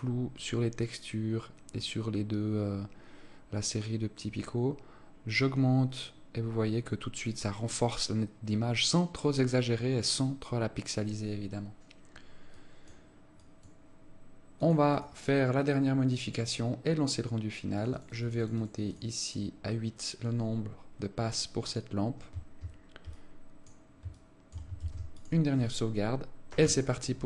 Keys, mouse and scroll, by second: 15.5 click, 15.9-16.2 scroll down 3, 16.6 right click, 18.3 click, 18.5 click, 18.7 click, 18.9 click, 19.1 click, 19.4 click, 23.7 alt+click, 24.7 alt+shift+click, 25.3 ctrl+s.